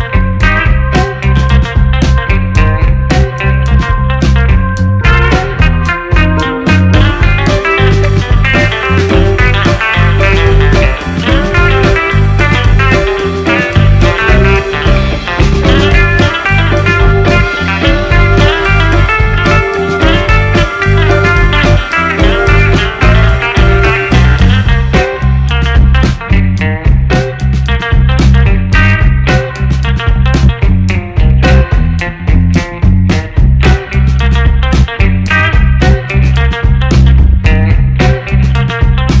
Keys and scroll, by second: 5.7 2, 5.9 4, 6.0 Return, 6.7 shift+Right, 16.7 ctrl+space, 33.1 ctrl+a, 34.1 s, 34.3 r, 34.4 Return.